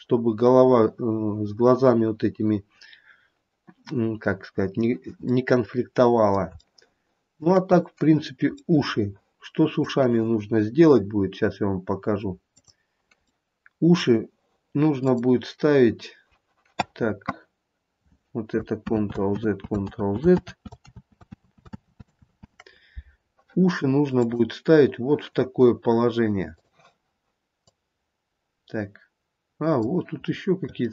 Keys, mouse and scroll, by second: 5.5 middle click, 6.7 shift+middle click, 7.0 shift+middle click, 8.8 middle click, 9.1 middle click, 9.4 middle click, 12.7 click, 13.5 middle click, 14.1 middle click, 15.2 click, 15.6-17.1 scroll down 2, 19.0 ctrl+z, 19.5 ctrl+z, 20.1 ctrl+z, 20.6 ctrl+z, 21.0 ctrl+z, 21.6 ctrl+z, 21.9 ctrl+z, 24.3 click, 26.7 click, 30.3-30.9 scroll up 3.